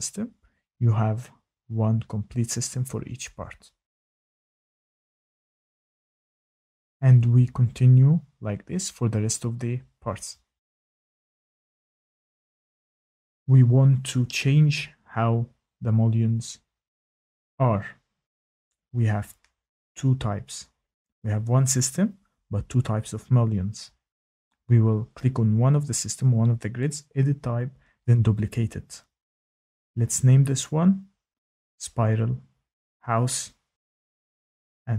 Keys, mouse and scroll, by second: 0.2 click, 3.1 click, 4.6 click, 5.1 click, 5.6 click, 6.6 click, 7.5 Tab, 7.9 Tab, 8.5 click, 9.8 Tab, 10.5 click, 11.1 click, 11.2 click, 11.3 click, 11.4 Tab, 11.4 click, 11.5 Tab, 11.5 click, 11.5 click, 11.6 click, 11.7-12.2 Tab, 11.8 click, 11.9 click, 11.9 click, 12.0 click, 12.4 Tab, 12.5 click, 12.6 click, 12.6 Tab, 12.7 click, 12.8 Tab, 12.8 click, 12.9 click, 13.0 click, 13.1 Tab, 13.1 click, 13.2 click, 13.3 click, 13.9 Escape, 21.7 click, 27.9 click, 29.6 click, 31.6 click, 31.9 Caps_Lock, 32.3 s, 32.5 Caps_Lock, 32.7 p, 34.1-34.9 typing.